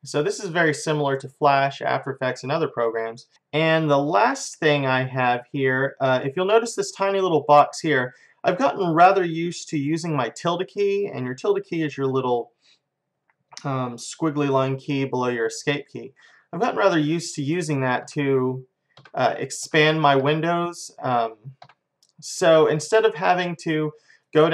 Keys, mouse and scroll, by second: 3.3-4.5 drag, 24.2-24.5 drag.